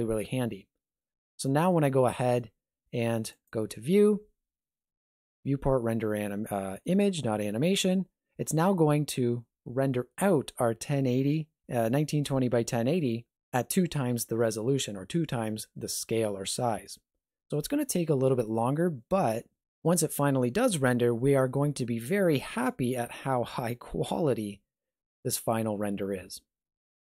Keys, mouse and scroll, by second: 3.3 click.